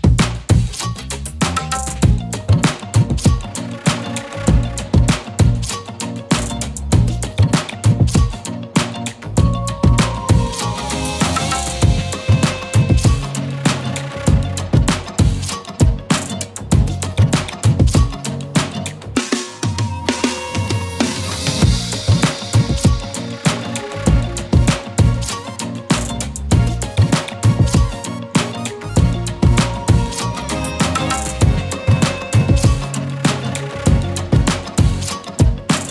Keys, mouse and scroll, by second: 5.2-8.4 typing, 5.5 click, 5.8 click, 6.2 click, 7.0 click, 7.3-8.2 click, 7.8 click, 8.2 click, 8.5 click, 16.3 z, 16.4 space, 16.9 shift+click, 18.1 right click, 18.7 click, 25.2 click, 29.1 click, 30.3 shift+click.